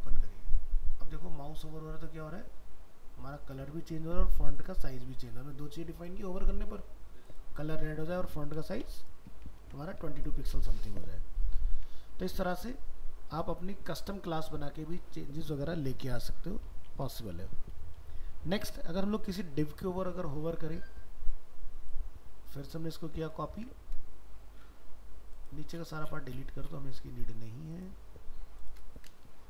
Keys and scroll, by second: 9.6 ctrl+s, 11.7 ctrl+w, 17.1 ctrl+w, 23.6 ctrl+c.